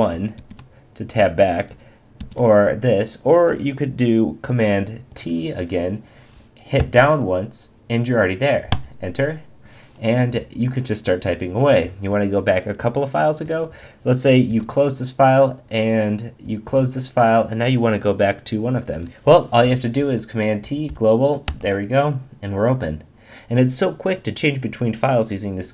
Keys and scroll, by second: 0.4 super+1, 2.2 super+2, 5.1 super+t, 6.8 Down, 8.7 Return, 14.5 super+w, 18.9 super+t, 19.1 Escape, 20.0 super+t, 21.5 Return.